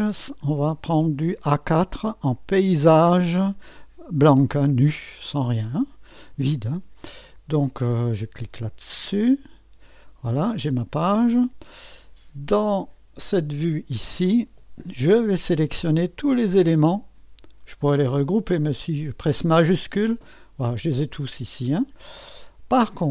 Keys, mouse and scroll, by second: 3.4 click, 9.3 click, 12.5 click, 16.3 click, 17.3-18.4 middle drag, 19.7-23.1 drag.